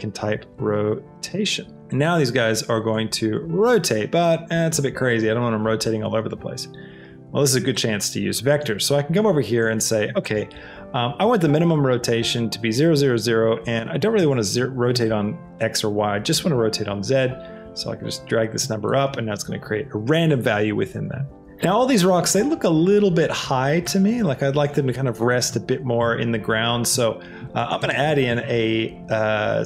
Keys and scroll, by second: 0.9 t, 1.3 o, 1.8 Return, 1.8 n, 14.0 Tab, 25.9 KP_0, 28.4 a.